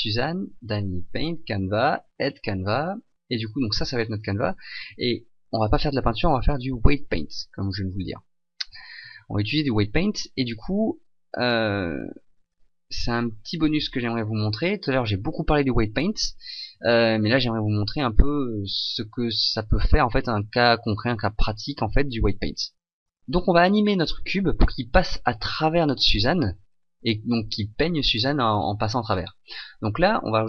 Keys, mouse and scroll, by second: 7.9 click, 23.3 right click, 25.2 click.